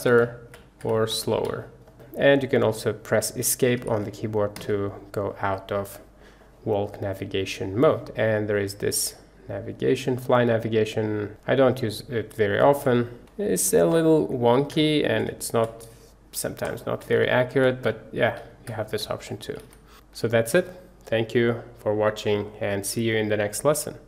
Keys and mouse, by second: 8.7-10.8 middle drag, 10.8-19.9 drag.